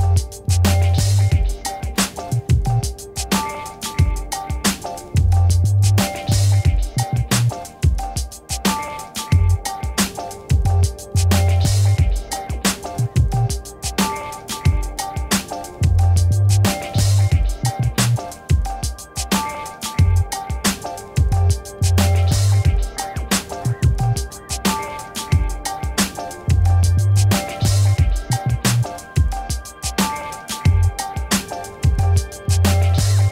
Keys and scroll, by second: 22.7-25.7 typing, 25.7 Return.